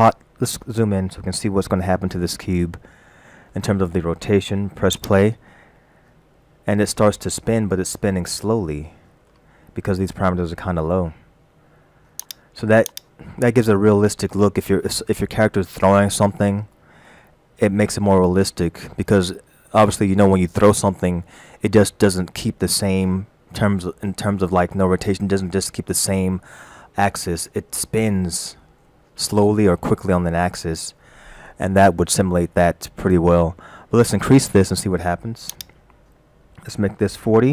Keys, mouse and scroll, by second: 0.3-1.0 scroll up 2, 1.6 shift+middle click, 4.9 click, 7.0-7.3 scroll down 3, 8.3 shift+middle click, 12.2 click, 12.9 click, 35.6 click.